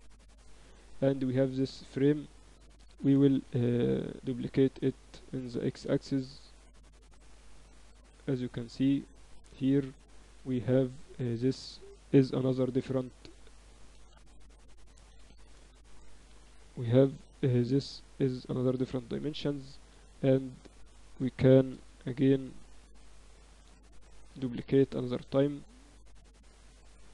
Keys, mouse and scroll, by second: 0.3-3.6 middle drag, 3.2 shift+d, 4.2-6.2 middle drag, 6.2-7.9 drag, 10.3 Tab, 11.2 a, 12.0 b, 13.2-14.6 drag, 13.8 z, 14.6 ctrl+z, 14.9 a, 15.4 a, 15.6 a, 16.4 b, 17.6-19.2 drag, 19.2 middle click, 20.2 a, 20.2 a, 20.6 Tab, 21.4 shift+d, 24.0-25.8 drag, 26.6 Tab.